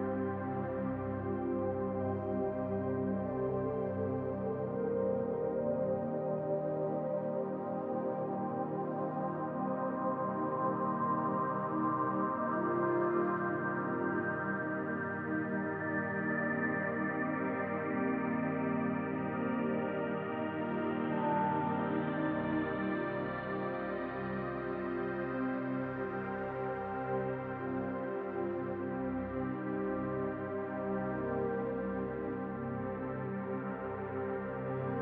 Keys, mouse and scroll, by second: 3.8 click, 4.9 click, 5.6-6.3 scroll up 2, 6.3 click, 7.1-8.7 scroll up 2, 8.7-10.2 drag, 10.5-12.0 drag, 14.4-16.0 drag, 18.6-20.2 drag, 31.0 click, 32.4-35.0 drag.